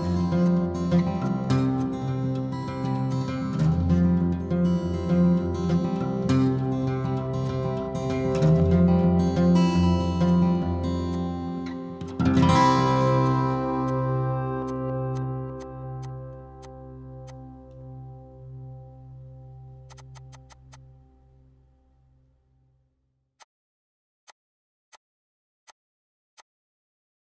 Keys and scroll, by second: 1.0 space, 1.6 m, 6.8-7.2 typing, 8.9 Escape, 12.6 m, 14.1 p, 16.5 e, 17.6 Escape, 20.1 e, 22.4 Escape, 23.8 m.